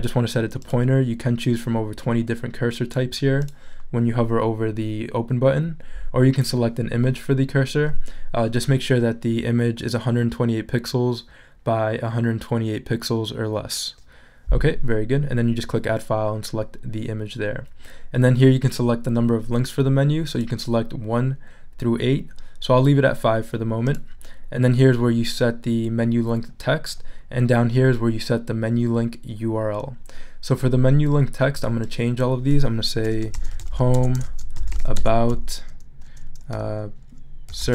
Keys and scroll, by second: 33.1-35.3 typing, 37.3-37.7 typing.